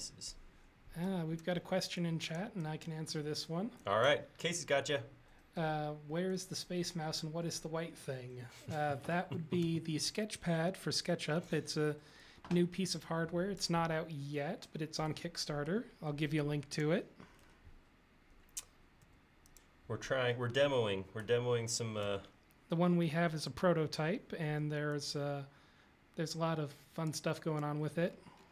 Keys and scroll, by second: 5.7 space, 9.7 Delete, 11.5 e, 19.1 space, 22.1 Delete, 24.5 e.